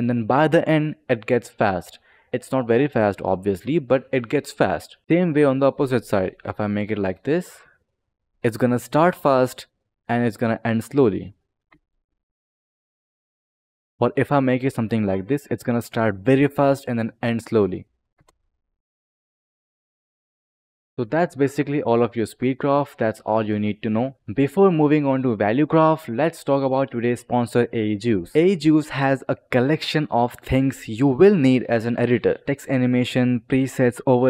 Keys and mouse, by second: 5.0 click, 5.3 click, 7.4 click, 11.6 space, 13.9 click, 14.7 click, 17.5 click, 18.1 space, 20.9 click.